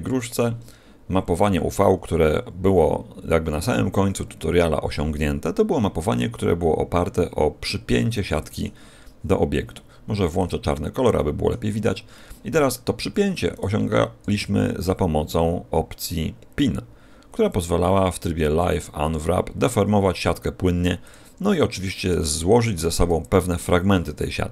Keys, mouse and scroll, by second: 0.1 Tab, 6.9-8.1 scroll up 4, 8.1 middle click, 9.1 scroll up 1, 10.3 click, 11.1 middle click, 11.7-12.1 scroll up 4, 12.1 middle click, 13.5 right click, 14.2 g, 21.1 click, 21.4-22.2 scroll down 5, 22.2 shift+middle click.